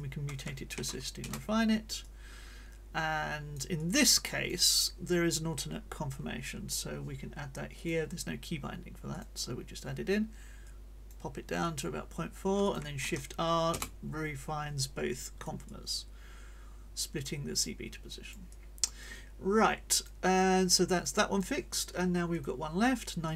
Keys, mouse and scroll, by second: 0.7 shift+r, 1.2 shift+Return, 2.0-4.7 drag, 7.7 click, 9.1 click, 10.6 click, 11.6 click, 12.6 shift+click, 13.0 shift+r, 13.7 Return, 15.1 click, 23.2 click.